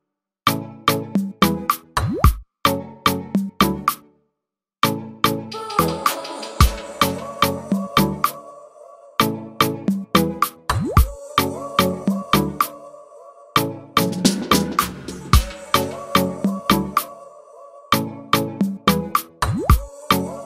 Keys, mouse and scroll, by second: 0.0-1.5 drag, 2.0 click, 4.5 click, 7.2 click, 8.4 scroll down 1.